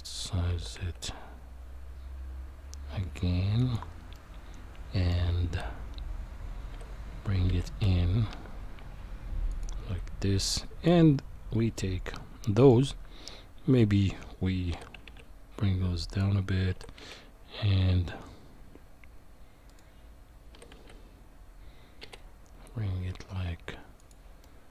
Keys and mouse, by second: 0.5 s, 4.1 middle click, 6.7 g, 10.6 click, 12.4 middle click, 14.7 g, 16.7 s, 20.5 g, 24.4 middle click.